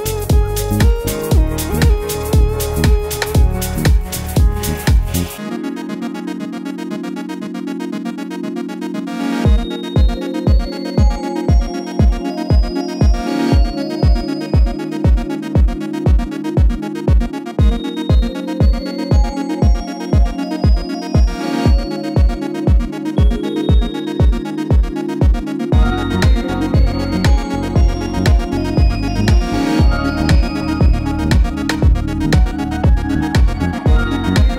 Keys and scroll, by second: 11.0 3, 12.6 Return, 12.9 4, 15.0 Return, 15.0 7, 16.3 6, 18.0 Return, 29.6-30.5 typing.